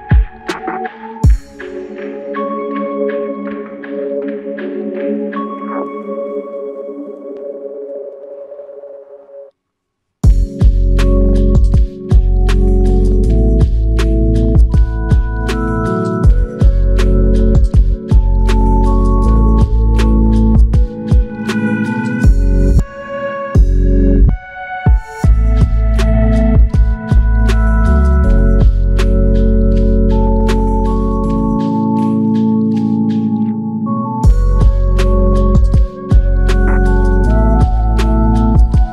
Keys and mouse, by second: 0.8 typing, 3.1 double click, 5.1 alt+m, 10.7 double click, 14.0 alt+click, 15.8 shift+click, 17.2-17.5 typing, 18.7 typing, 22.5 double click, 25.5 shift+click, 30.5 alt+click, 32.3 f, 35.2 f, 36.2 ctrl+click.